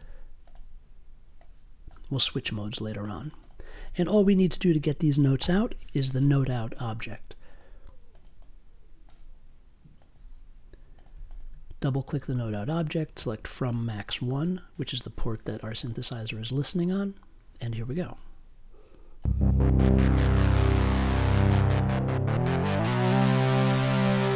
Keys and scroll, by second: 5.4 n, 6.2 t.